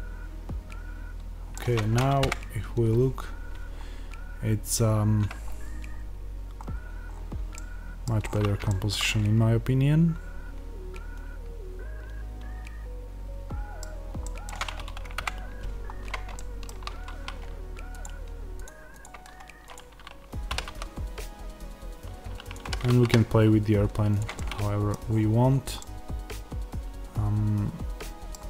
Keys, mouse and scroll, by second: 2.1 KP_0, 3.7-5.3 scroll down 2, 5.3-5.8 scroll up 2, 5.8-6.5 scroll down 2, 6.5-7.0 scroll up 2, 7.0-7.4 scroll up 1, 8.1-8.6 scroll up 1, 13.8-14.1 scroll down 1, 15.1 KP_0, 15.8-16.3 scroll down 1, 17.8-20.5 drag, 20.5 r, 22.4 click, 22.6 g, 24.1 click, 24.3-28.4 middle drag, 25.0-25.4 scroll, 28.3-28.4 scroll.